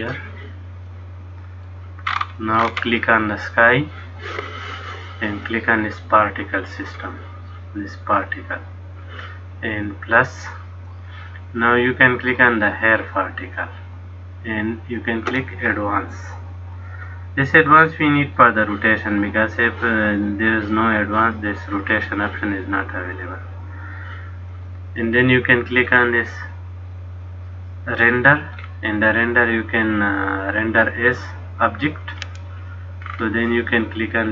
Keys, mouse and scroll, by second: 1.1 middle click, 2.2-2.8 scroll up 3, 2.8-3.6 scroll up 9, 3.6 click, 6.9 click, 10.5 click, 13.7 click, 16.9 click, 19.7 click, 23.4 click, 28.1 click, 28.7-30.8 scroll down 1, 30.8 click, 30.8 scroll down 1, 33.2-33.6 scroll down 5.